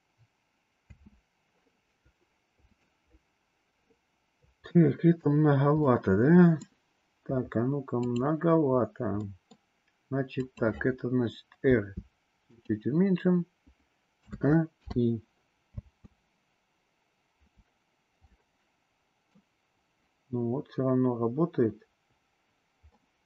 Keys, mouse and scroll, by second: 0.9 space, 2.5 click, 4.6-5.2 middle drag, 5.8-6.6 middle drag, 9.2 middle click, 10.3 click, 11.6 r, 14.3 a, 14.8 i, 15.8 space, 18.3-19.4 middle drag, 23.0 middle click.